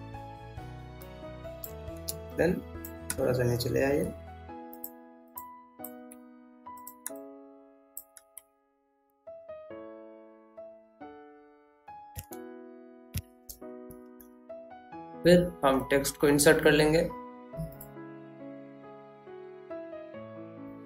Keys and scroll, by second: 10.9 ctrl+s, 14.6 F9.